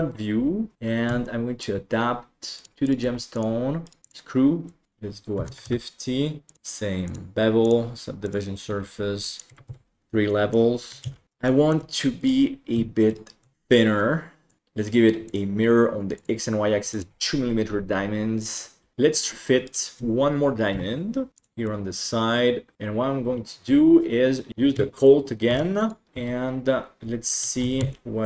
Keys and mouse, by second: 1.2 shift+middle click, 2.6 right click, 2.7 g, 3.0 g, 3.8 right click, 4.0 click, 4.8 click, 6.4 click, 7.7-8.3 drag, 9.2 click, 10.3 middle drag, 11.0 alt+z, 11.2 Tab, 11.4 shift+middle click, 12.2 right click, 13.0 ctrl+right click, 13.9 click, 14.6-15.4 drag, 17.1 m, 18.5 right click, 19.1 right click, 19.6 shift+right click, 20.7 KP_7, 21.3 g, 21.7-22.7 middle drag, 25.6 shift+d, 26.7 KP_1, 28.1 ctrl+shift+s, 28.1 shift+middle click.